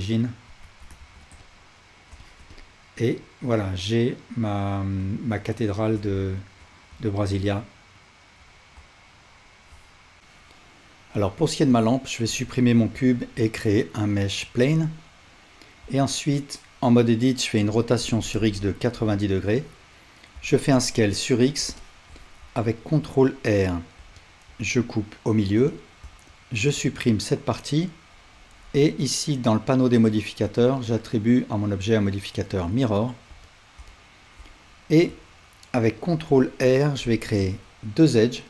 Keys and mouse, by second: 0.6 Tab, 1.0 alt+z, 10.2-11.9 drag, 12.3 x, 13.2 shift+a, 15.8 Tab, 17.6 r, 20.4 s, 21.5 click, 21.8-25.8 shift+drag, 22.9 ctrl+r, 26.4 shift+click, 26.8 x, 30.6-38.4 drag, 36.1 ctrl+r.